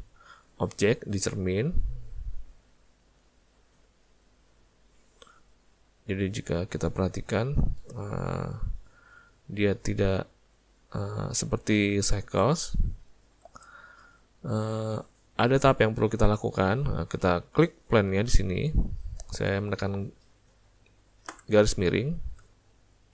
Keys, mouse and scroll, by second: 3.2 right click, 6.4 click, 8.9 click, 13.3 ctrl+z, 14.1 alt+a, 18.2 click, 21.4 /.